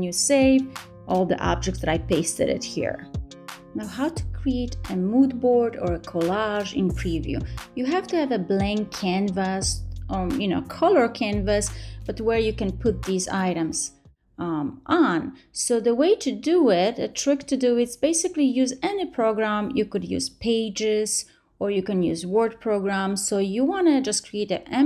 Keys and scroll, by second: 0.1 super+v.